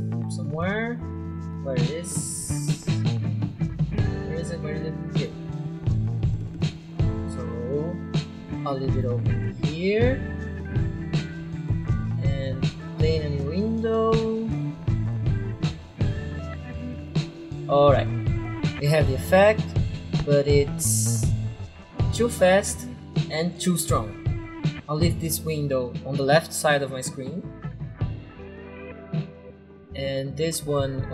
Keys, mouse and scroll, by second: 0.0-0.4 scroll down 2, 5.1 click, 7.5 click, 10.5 click, 10.5 click, 11.2 click, 11.7 click, 13.0 click, 15.5 click, 17.0 click, 17.1 click, 19.7 click, 21.2 click, 21.3 click, 26.3 click.